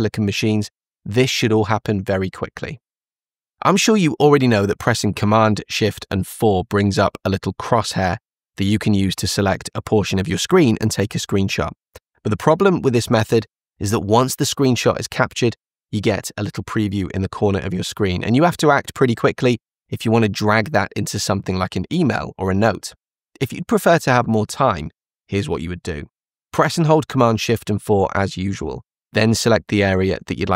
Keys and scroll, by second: 5.6 shift+super+4, 25.6 shift+super+4.